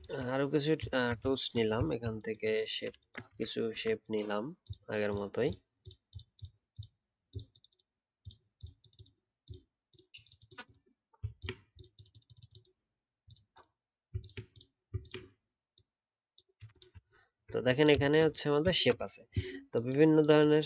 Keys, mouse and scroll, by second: 0.8 shift+click, 2.0 shift+click, 11.3 ctrl+click, 14.2 ctrl+click, 15.0 ctrl+click, 17.0 alt+scroll down 4, 17.3-19.1 alt+scroll up 1.